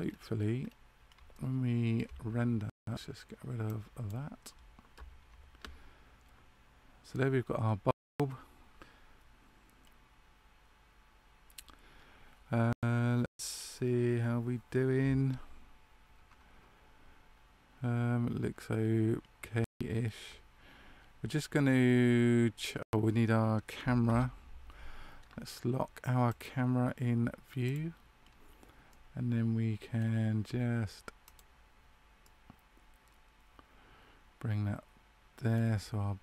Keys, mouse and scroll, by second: 0.0-0.7 scroll up 3, 1.2 shift+middle click, 1.2-1.9 shift+scroll down 1, 3.6 click, 24.0 KP_0, 26.2 click, 28.8 middle click, 31.3 click, 32.2 middle click.